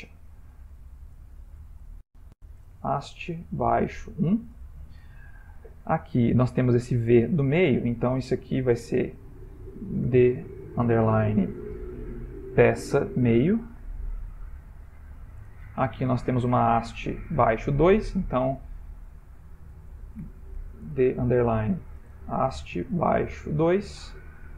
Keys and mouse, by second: 0.0-1.2 typing, 7.5 click, 9.1 F2, 14.4 BackSpace, 16.9 click, 19.0 F2.